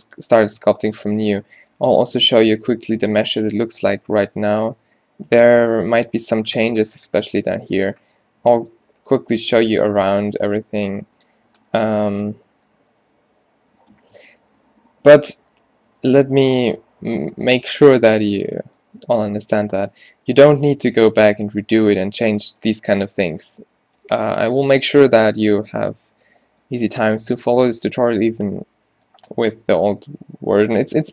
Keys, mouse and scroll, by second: 1.7 click, 2.2 Tab, 2.7 a, 2.9 a, 8.8 a, 11.1 middle click, 23.4 middle click.